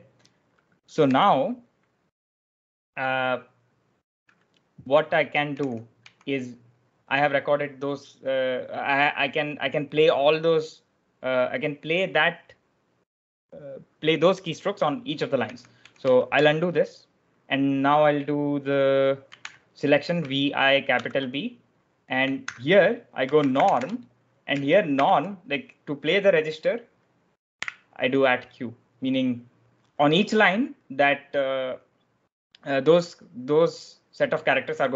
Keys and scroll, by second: 1.0 j, 5.4 k, 6.9 j, 15.0-16.7 typing, 18.9-19.8 typing, 20.9 shift+b, 22.4-24.9 typing, 27.5 q.